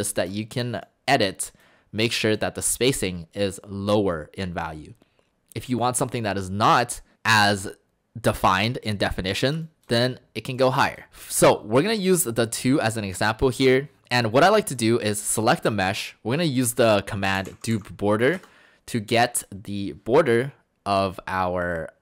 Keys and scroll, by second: 17.0-18.2 typing, 18.4 Return.